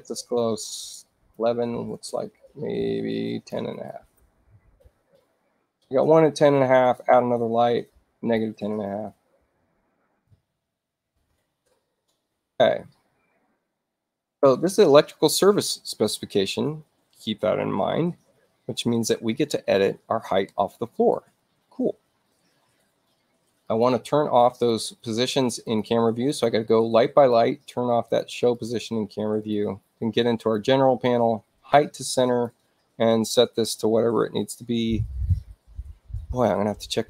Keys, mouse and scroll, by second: 0.1 click, 1.1 1, 1.3 1, 1.9 Tab, 3.2 click, 4.0-5.2 typing, 6.8 click, 8.1 click, 9.1-10.9 typing, 23.6 click, 24.5 click, 25.6 click, 26.2 click, 27.1 click, 28.0 click, 28.5 click, 29.4 click, 30.3 click, 32.0 click.